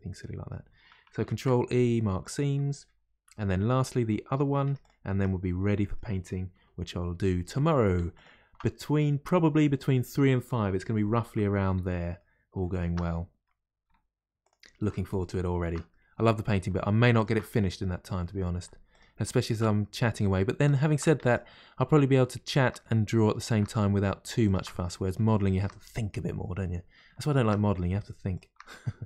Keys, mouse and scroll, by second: 0.1-0.9 scroll up 1, 0.9 scroll down 1, 1.0-1.5 scroll up 1, 2.4-3.3 scroll down 1, 3.3 KP_Divide, 3.7-4.3 scroll down 2, 15.2 alt+shift+click, 24.5 alt+shift+click, 27.3 alt+shift+click.